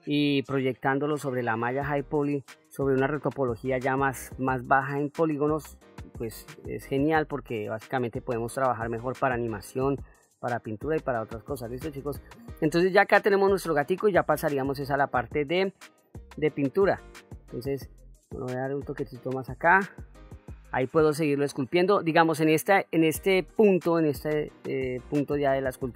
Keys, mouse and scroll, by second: 6.7 middle click, 7.6 middle click, 8.4 middle click, 10.0 middle click, 11.1 middle click, 13.0 middle click, 14.3 middle click, 16.4 shift+click, 16.8 shift+click, 17.3 shift+click, 18.1 shift+click, 18.4 shift+click, 18.7-19.7 middle drag, 19.7 shift+click, 19.8 shift+middle click, 20.0 shift+click, 20.5 shift+click, 21.0 shift+click, 21.5 middle click, 24.3 middle click, 25.3 middle click.